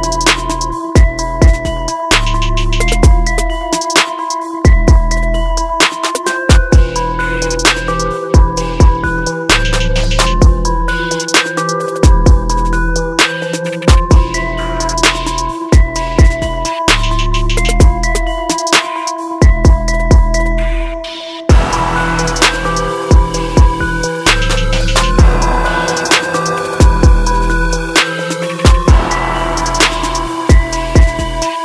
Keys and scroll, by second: 1.4 ctrl+alt+z.